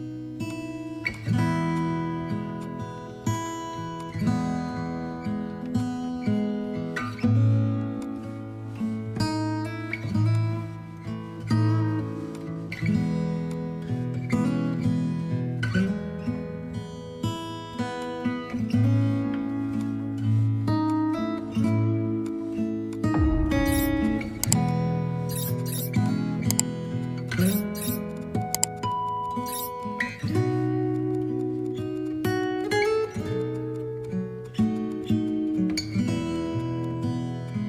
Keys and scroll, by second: 28.6 space, 31.4 space, 33.7 space, 35.2 space, 36.2 ctrl+z.